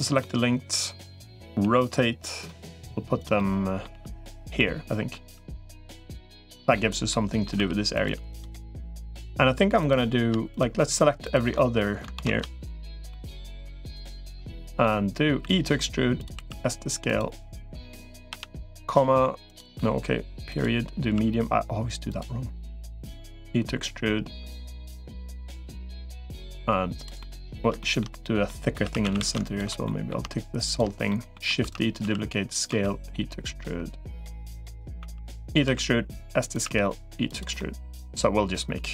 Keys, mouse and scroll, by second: 0.0-1.2 middle drag, 1.5 r, 2.5 g, 3.2 middle click, 3.7 g, 4.4 middle click, 5.1 g, 5.8 middle click, 6.9 middle click, 7.5 r, 7.9 g, 8.4 middle click, 10.3 shift+click, 11.3 middle click, 12.0 ctrl+z, 12.9-13.9 middle drag, 13.9 shift+click, 14.2 middle click, 15.3 e, 16.3 s, 18.1 ,, 19.5 ., 20.9 s, 23.3 e, 24.8-26.3 middle drag, 27.0 middle click, 27.6 shift+middle click, 28.3 middle click, 28.7 3, 28.9 a, 29.1 a, 29.3 alt+shift+click, 29.6 middle click, 30.5 shift+click, 30.9 middle click, 31.5 shift+d, 31.9 s, 32.5 e, 34.9 e, 35.5 s, 36.5 e, 37.4 middle click.